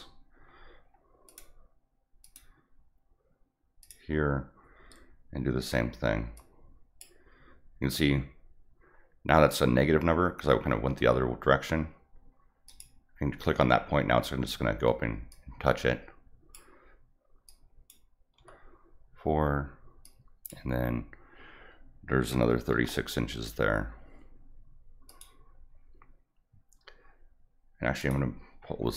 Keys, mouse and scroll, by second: 0.5-0.9 scroll up 2, 1.3 click, 2.2 click, 3.8 click, 6.3 click, 12.7 click, 15.3-16.5 drag, 17.5 click, 20.0 click, 25.1 click, 28.0 click, 28.7 scroll up 1.